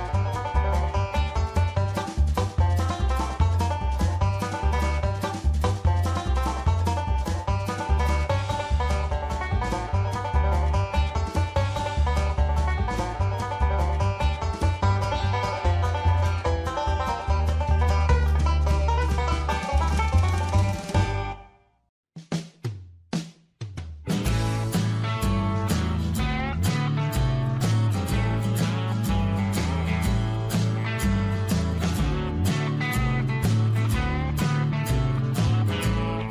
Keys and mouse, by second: 2.3 click, 2.9-5.7 drag, 6.6 shift+middle click, 7.6 click, 9.4-10.5 drag, 17.9 click, 18.4 click, 19.8-21.4 drag, 22.4-24.6 drag, 25.2 shift+middle click, 29.5 middle click, 30.3 shift+middle click, 33.0 f.